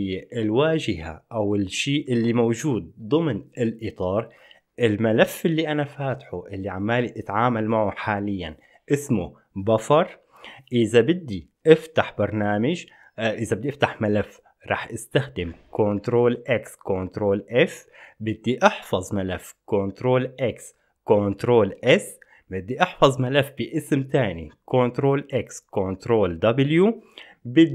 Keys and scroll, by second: 15.6 ctrl+x, 15.6 ctrl+f, 19.7 ctrl+x, 19.7 ctrl+s, 24.4 ctrl+x, 24.4 ctrl+w.